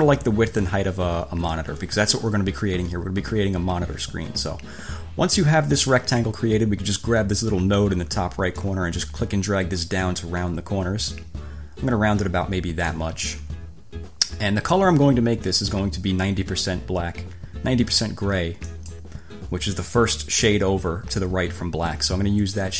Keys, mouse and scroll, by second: 8.8-13.3 drag, 18.9 click.